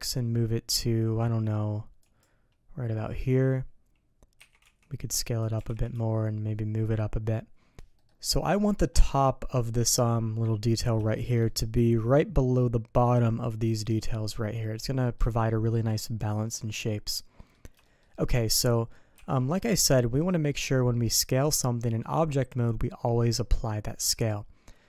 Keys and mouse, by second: 4.4 s, 5.5 g, 7.9 click, 8.5 shift+drag, 11.0 shift+click, 11.2 shift+middle click, 11.4 middle click, 14.8-15.1 middle drag, 16.6 middle drag, 17.3 middle click, 17.8 shift+middle drag, 18.4 middle click, 19.1 n.